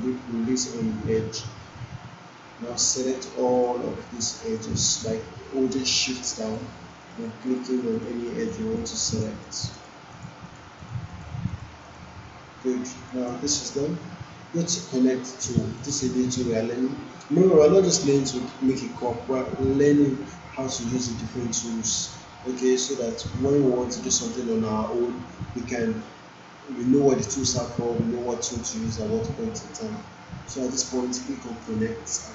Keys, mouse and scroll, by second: 2.7 click, 3.1 shift+click, 8.1 shift+click, 31.6 click.